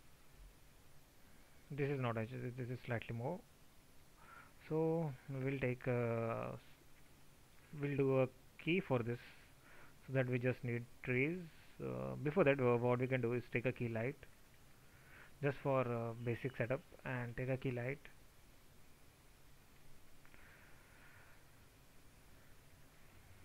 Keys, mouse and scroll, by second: 16.1 ctrl+z.